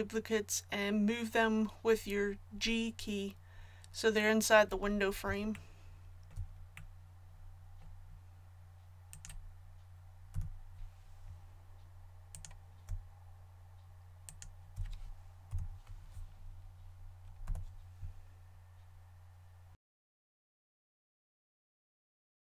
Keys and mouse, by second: 10.3 a, 15.4 KP_1, 17.4 g, 19.9 click, 20.1-22.3 typing, 20.4 click, 21.1 click, 21.5 ctrl+z, 21.6 click, 22.2 click.